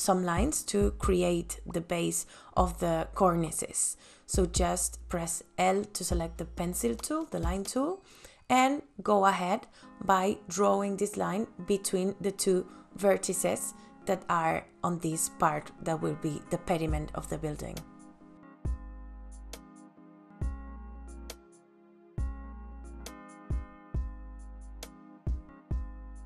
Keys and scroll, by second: 0.8 space, 18.6 l, 23.4 space, 23.8 ctrl+s.